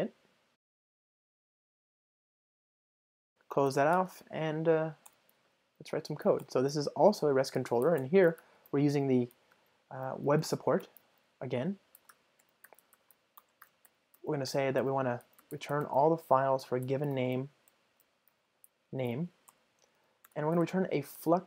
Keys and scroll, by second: 1.5 Return, 2.9 super+BackSpace, 3.8 ctrl+shift+super+o, 8.1 Return, 13.4 Return.